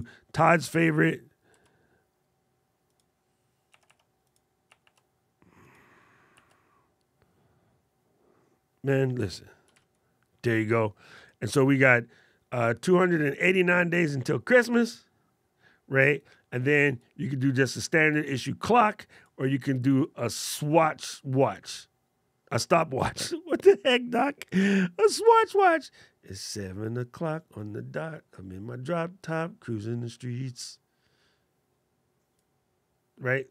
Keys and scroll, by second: 25.1 alt+super+8.